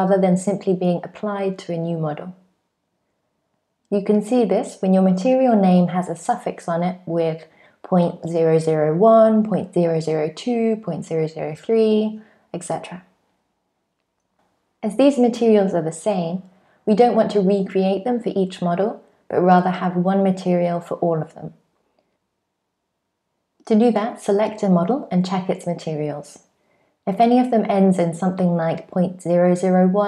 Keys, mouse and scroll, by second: 0.5 click, 1.6 click, 2.4-4.0 scroll down 4, 4.1 click, 5.4-6.6 scroll down 3, 6.6 click, 7.4-8.8 scroll down 5, 8.8 click, 10.0 click, 10.7-11.7 scroll down 4, 12.0-12.6 scroll up 1, 12.6-13.2 scroll up 5, 13.2-14.0 scroll up 10, 14.0 click, 14.0 scroll down 1, 14.9 click, 19.0 click, 20.1 click, 22.5 click, 23.5 click, 26.3-27.6 scroll down 3, 27.6 click, 27.6-28.8 scroll down 1, 28.8 click.